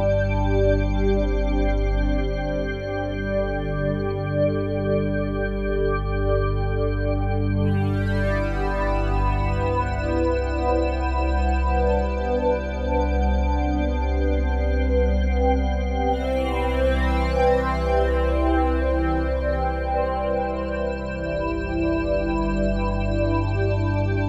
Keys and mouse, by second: 0.0 click, 1.1-4.1 drag, 5.2 ctrl+s, 7.1-14.0 drag, 16.9-18.7 drag, 19.9 ctrl+s, 21.8 click.